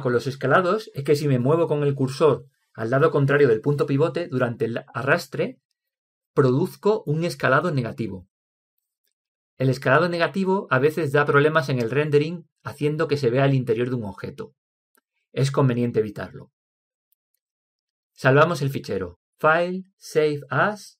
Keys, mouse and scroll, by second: 2.8 s, 5.2 s, 16.7 Escape.